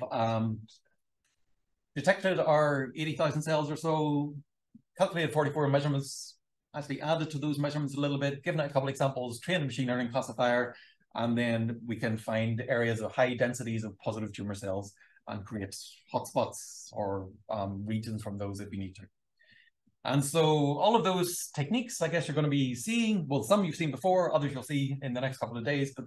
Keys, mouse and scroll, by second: 2.7 click, 8.1 click.